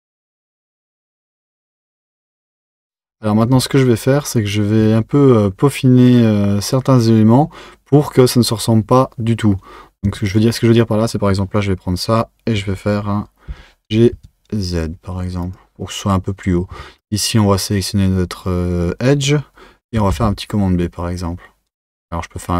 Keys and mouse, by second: 0.7 Tab, 1.5 click, 2.0 Tab, 10.3 click, 13.5 g, 17.0 click, 20.1 b.